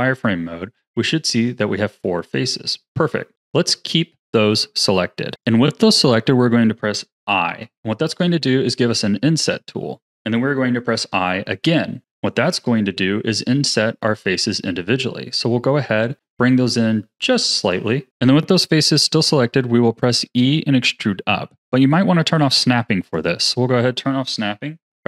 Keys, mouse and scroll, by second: 0.7-3.3 middle drag, 3.3-5.3 scroll up 1, 5.3 click, 7.6 i, 23.0 click, 24.9 e.